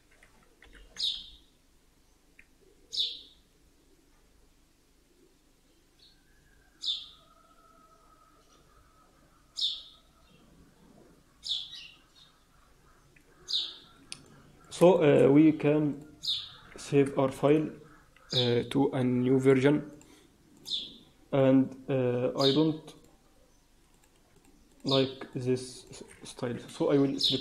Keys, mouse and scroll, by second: 0.5 ctrl+l, 7.9-9.6 scroll down 4, 14.2 middle click, 14.8 shift+middle click, 15.8 click, 17.3 ctrl+shift+s, 22.9 click, 23.8 click, 24.2 shift+click, 24.7 shift+click, 25.2 shift+click, 27.3 shift+click.